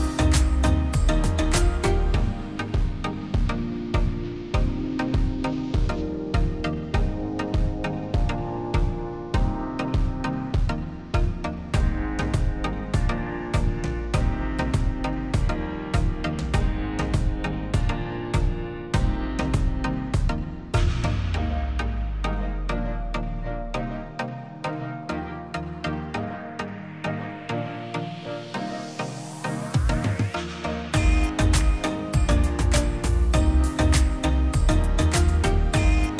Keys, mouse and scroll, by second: 7.0 Return, 7.0 0, 7.4 double click, 11.4 6, 11.8 Return, 14.1 8, 14.7 Return, 21.4 F10, 31.5 F10, 32.0 F10.